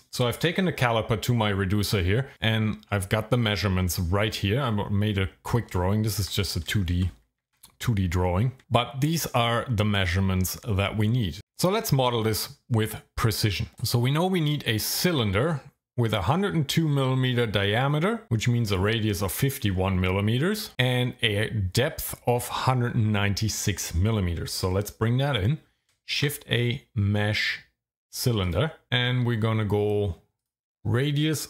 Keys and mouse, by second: 7.4 `, 8.6 `, 12.3 middle click, 26.2 shift+a, 30.4-31.4 drag.